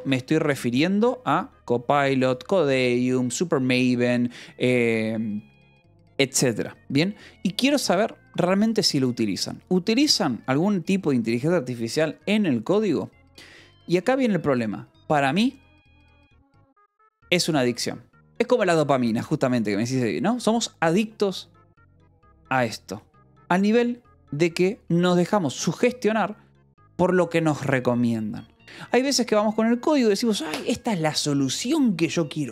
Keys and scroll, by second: 0.0-0.7 typing.